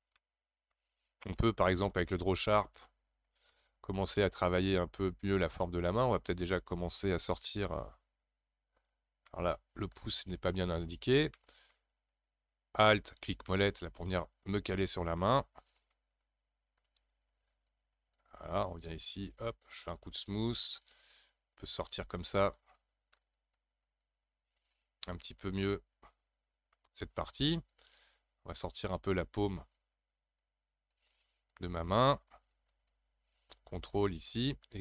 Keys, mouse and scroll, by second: 1.8 click, 2.4-4.5 middle drag, 4.5-6.0 scroll up 10, 6.0-9.3 drag, 9.3 middle click, 10.2 scroll down 3, 11.3-13.7 shift+middle drag, 14.2-16.3 middle drag, 16.3 f, 16.8 f, 17.5-22.5 drag, 22.5-23.1 scroll up 2, 23.1-24.6 drag, 24.6-25.0 scroll down 3, 25.0-27.6 middle drag, 27.6-34.8 drag.